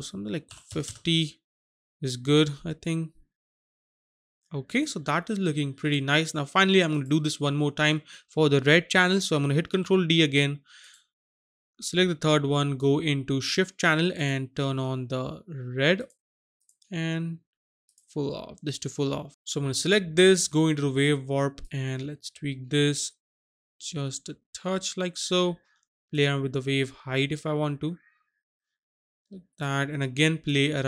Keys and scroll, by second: 0.5 KP_5, 0.7 KP_0, 0.8 Return, 9.6 ctrl+d.